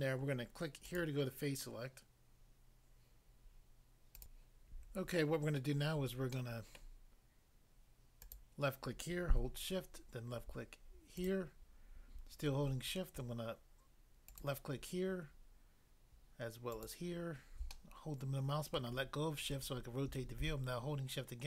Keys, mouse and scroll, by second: 0.8 click, 4.2 click, 4.9 click, 6.3 middle click, 6.8 middle click, 8.2 click, 8.3 click, 11.2 shift+click, 11.3 shift+click, 14.3 shift+click, 16.7 shift+click, 17.8 middle click, 18.7 middle click.